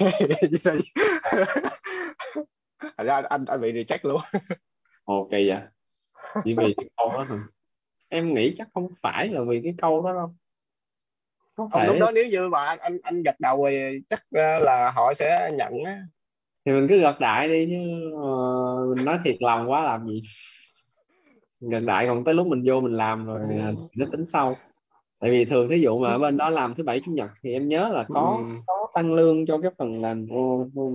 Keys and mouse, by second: 11.7 click, 14.0 click, 19.4 click.